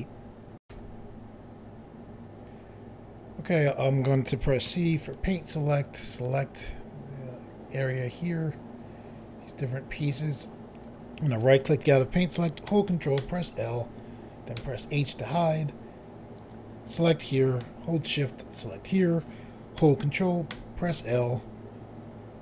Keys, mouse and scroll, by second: 0.6 Pause, 4.6 c, 5.1 click, 11.2 right click, 13.1 ctrl+l, 14.5 h, 16.3 click, 18.5 shift+click, 20.4 ctrl+i.